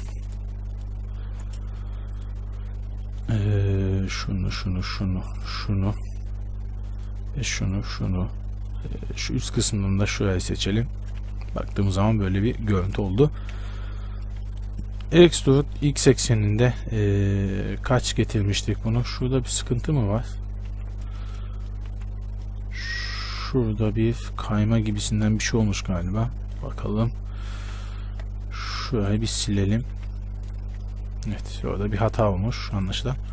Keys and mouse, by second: 2.0-4.2 right drag, 4.2-11.4 middle drag, 11.4 right click, 11.4 z, 12.2 middle click, 12.8 middle click, 12.8 z, 13.8 KP_1, 15.2 e, 19.3 z, 20.8 ctrl+z, 22.1 z, 25.3 KP_Decimal, 27.9 x, 29.3 click, 29.9-33.0 middle drag, 30.2 x, 33.0-33.3 drag.